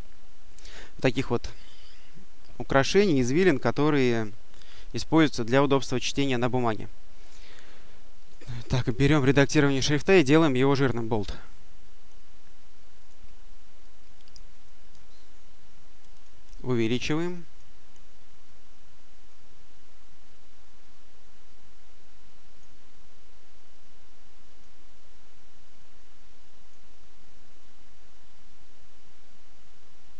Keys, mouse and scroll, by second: 8.1 click, 10.1 click, 12.8 click, 13.7 click, 15.0-16.5 ctrl+drag, 18.3 click, 20.2-22.9 drag, 23.6 click, 25.7 click, 27.5-30.1 drag.